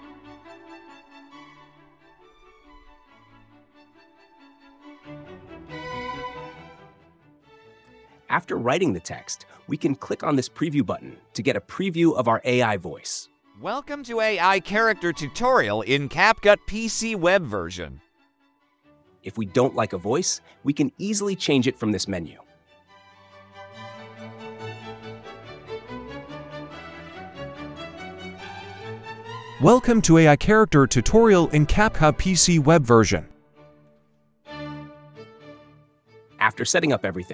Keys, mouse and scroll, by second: 0.0-0.5 typing, 1.6-4.2 typing, 10.4 click, 17.6-18.6 drag, 26.0-27.0 drag, 27.3-28.3 drag.